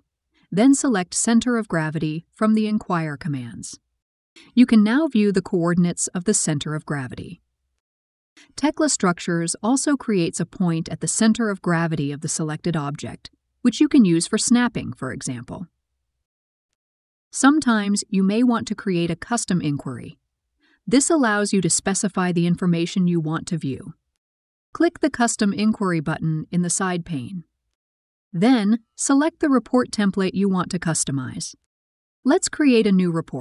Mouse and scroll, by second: 0.5 click.